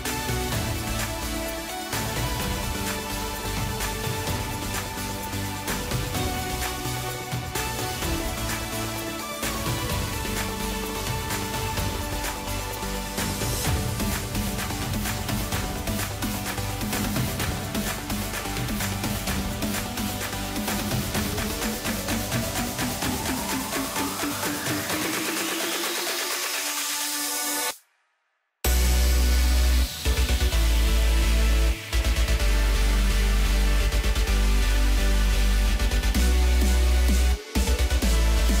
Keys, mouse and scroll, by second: 0.4 click, 0.7-1.5 scroll up 2, 1.5 g, 3.6-4.0 scroll down 2, 4.0 click, 4.8 g, 7.7 s, 9.4 g, 11.3 click, 12.0 s, 13.5 g, 16.2 scroll down 2, 16.4-18.8 middle drag, 18.8 KP_0, 19.6-20.4 scroll up 2, 20.4 click, 20.7-21.1 scroll up 1, 21.1 scroll down 3, 21.3-22.0 middle drag, 22.0-22.7 scroll up 1, 22.7 drag, 23.0 middle click, 23.3-23.7 scroll up 1, 23.7 click, 24.2 Tab, 25.0 KP_7, 25.5-26.9 scroll up 3, 26.9 click, 27.8-28.8 scroll up 4, 28.8 scroll up 1, 29.6 shift+click, 29.9 shift+click, 30.6 scroll down 3, 30.8-31.4 middle drag, 31.4-32.2 scroll down 4, 32.2 ctrl+KP_Add, 32.3 ctrl+KP_Add, 33.0 KP_Add, 33.9 KP_1, 34.6-35.0 scroll up 3, 35.0-36.0 middle drag, 36.0 ctrl+KP_Add, 36.7 middle click, 37.1-37.6 scroll down 2, 37.6-38.6 middle drag.